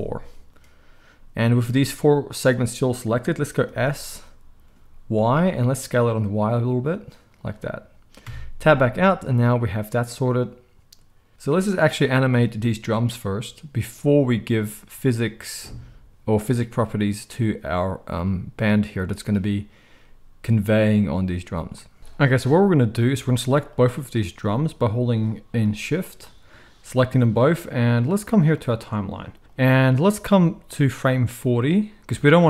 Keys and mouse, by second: 3.6 s, 7.4-12.3 middle drag, 8.2 Tab, 12.3 click, 12.4-22.0 middle drag, 22.0-23.7 drag, 23.7-27.6 middle drag, 27.6-32.4 drag.